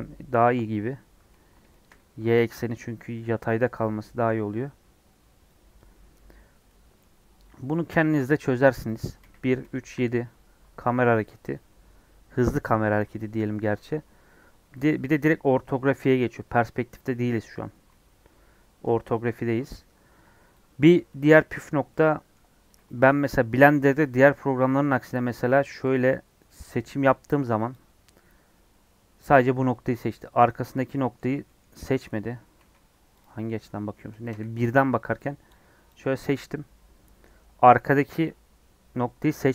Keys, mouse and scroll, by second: 0.3 scroll up 3, 1.6-2.9 shift+middle drag, 2.9 scroll down 3, 3.1-9.1 middle drag, 9.1 KP_1, 17.9-18.8 scroll up 7, 20.0 scroll down 1, 23.0 click, 24.9 Tab, 25.9 click, 27.6 click, 29.7 scroll down 1, 29.9-32.5 middle drag, 32.5 KP_1, 33.1 click, 34.2 KP_1, 35.8 click, 36.4-39.5 middle drag.